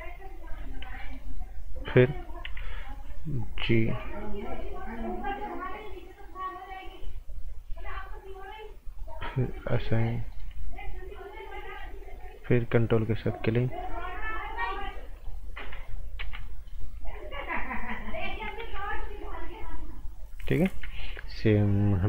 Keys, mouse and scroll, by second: 0.4 click, 1.0 alt+right click, 2.4 g, 3.0 click, 4.2 ctrl+click, 8.9 click, 10.3 alt+right click, 12.4 ctrl+click, 15.1 click, 15.5 right click, 16.2 z, 16.4 right click, 16.9 z, 17.5 click, 18.6 ctrl+z, 19.3 click.